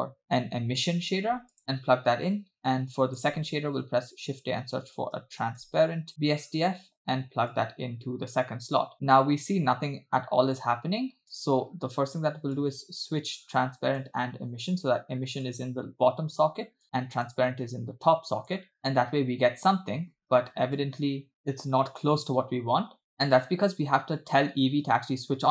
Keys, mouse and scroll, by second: 1.6-2.6 drag, 2.7-3.2 drag, 3.6 shift+a, 7.6-8.9 drag, 8.9-9.3 scroll up 2, 8.9 space, 11.4 space, 12.6-14.2 drag, 15.5 click, 15.7-16.6 drag, 16.9 click, 17.8 click, 18.8 space, 20.2 space, 20.5 space, 20.8 space, 21.4-21.9 scroll up 4, 22.0-23.1 scroll down 4, 24.3 click.